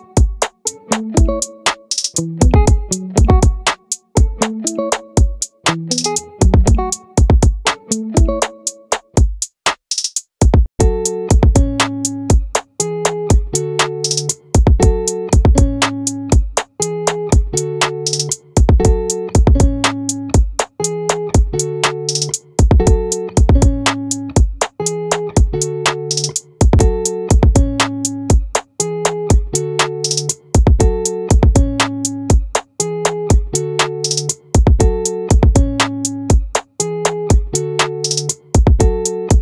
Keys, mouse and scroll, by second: 0.8-5.0 drag, 5.6 right click, 5.9-7.8 middle drag, 8.6-10.4 drag, 10.4-13.8 middle drag, 16.8-18.6 drag, 19.2-21.5 middle drag, 21.5 right click, 21.9 middle click, 22.5-23.8 right drag, 27.3-31.9 right drag, 31.9 middle click, 32.5-38.5 right drag.